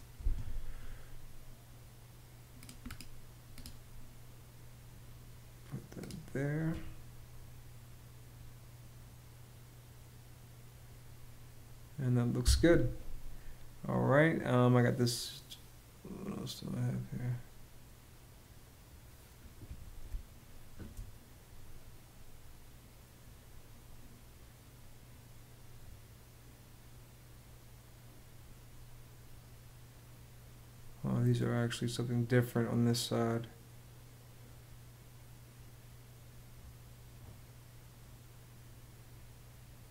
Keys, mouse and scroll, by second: 12.1 Escape, 19.7 space.